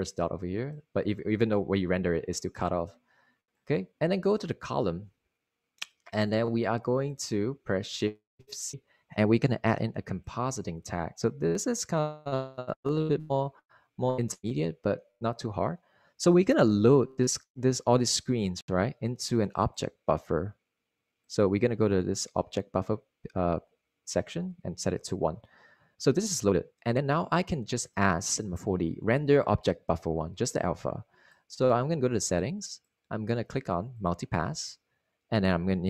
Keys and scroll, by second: 4.5 super+r, 11.1 c, 12.7-14.2 typing, 15.1 Return.